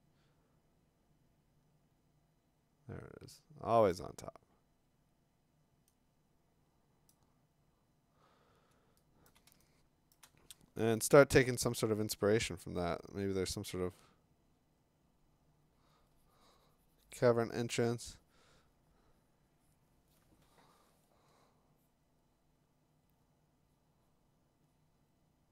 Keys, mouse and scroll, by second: 3.9-5.9 drag, 7.1 click, 7.6 scroll, 8.2 scroll, 9.3 click, 9.4 click, 9.5 click, 10.0 click, 10.2 click, 10.2 click.